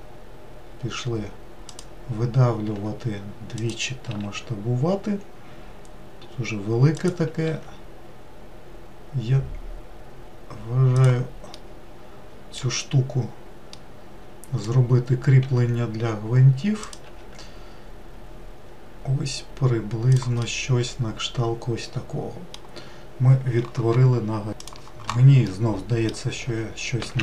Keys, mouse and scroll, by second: 2.4 e, 7.2 e, 11.3-12.5 middle drag, 12.5-13.4 scroll down 1, 13.4-15.1 middle drag, 15.1 e, 20.1-23.1 middle drag, 25.4-26.9 middle drag, 26.9 alt+z.